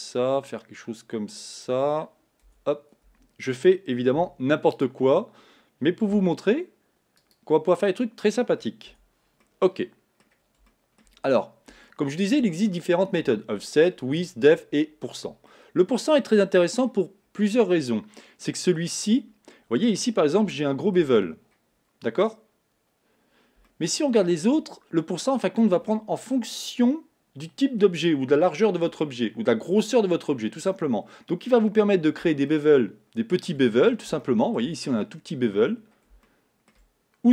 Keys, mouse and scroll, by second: 2.5 Tab, 3.1 Tab, 4.2 3, 4.8 click, 6.2 e, 7.7 scroll up 2, 8.4 scroll down 2, 8.9 Tab, 9.5-11.3 middle drag, 11.3 scroll up 3, 11.9-14.9 shift+middle drag, 15.5-17.2 middle drag, 17.2-17.8 scroll down 2, 17.8-21.2 middle drag, 21.2-23.0 scroll up 3, 23.0-23.7 scroll up 1, 23.7-24.8 shift+middle drag, 24.8-27.9 scroll up 2, 32.5-33.8 shift+middle drag, 33.8-34.2 scroll down 3, 34.2 shift+middle click, 34.8-35.8 scroll up 2, 35.8-36.3 scroll down 2, 36.3 shift+middle click, 37.0-37.3 scroll up 1.